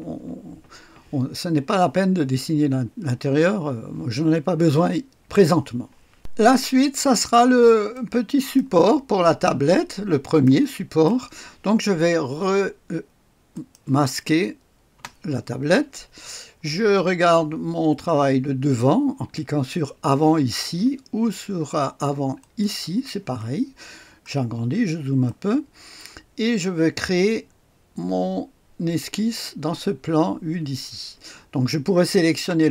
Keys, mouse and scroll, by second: 6.1-9.2 drag, 9.4-10.4 drag, 10.6 click, 13.5 click, 14.9 space, 22.3 click, 24.0-25.2 scroll up 1, 25.2 click.